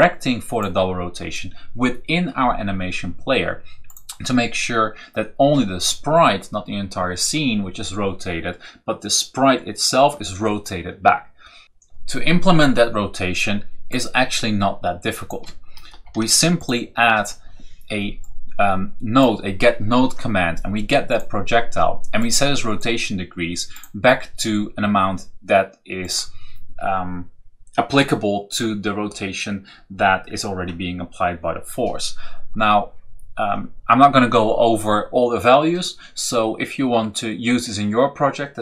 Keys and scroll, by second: 15.7 ctrl+v, 16.4 v.